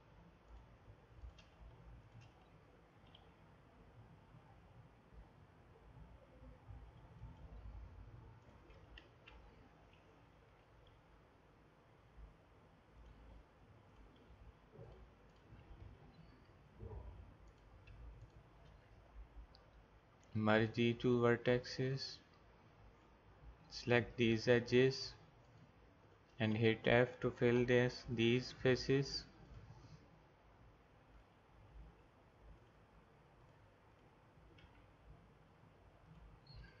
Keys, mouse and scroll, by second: 3.0 e, 8.4 click, 9.1 ctrl+z, 10.7 e, 14.0-17.3 drag, 15.8 g, 18.2-20.1 drag, 20.2 alt+m, 22.9-27.7 drag, 27.6 f, 34.6 g, 36.6-36.8 drag.